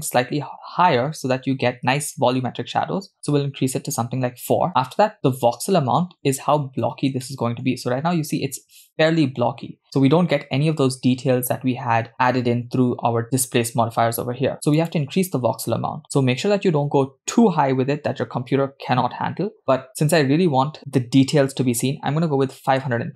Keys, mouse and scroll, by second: 6.8-7.2 scroll up 2, 7.3-7.7 shift+middle drag, 7.7-8.6 scroll up 2, 11.2-12.2 scroll down 2, 14.8-23.1 drag.